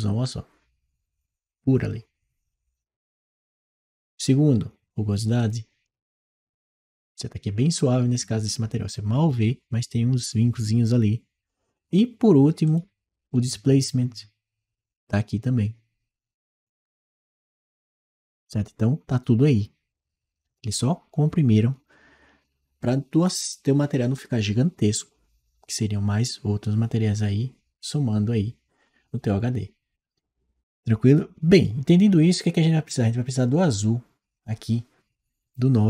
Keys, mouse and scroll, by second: 5.2 click, 5.7 click, 13.1 click, 29.9-31.8 drag.